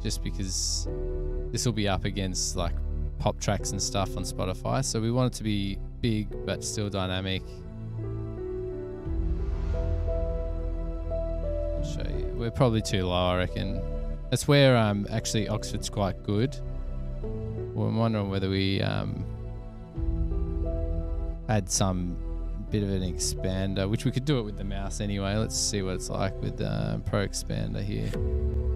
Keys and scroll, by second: 24.7-26.0 typing, 26.9 Page_Down, 27.0 Page_Down, 27.7 Return.